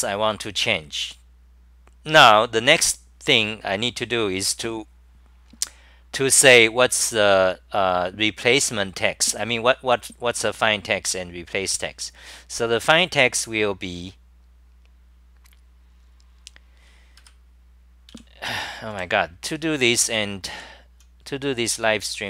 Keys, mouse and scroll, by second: 0.5-2.3 scroll down 36, 3.8-5.1 scroll down 14, 5.4-6.0 scroll down 6, 11.1 ctrl+shift+Tab, 17.2 6, 18.1 j, 18.9 ctrl+Tab, 20.6-22.2 typing.